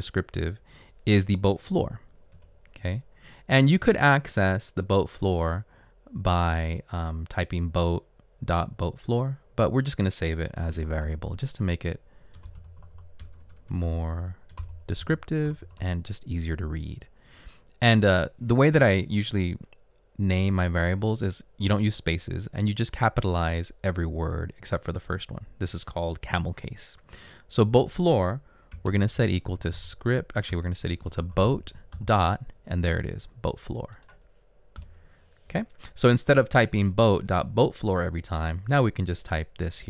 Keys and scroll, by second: 3.1 Return, 10.6-16.4 typing, 27.9-32.0 typing, 34.8 Return.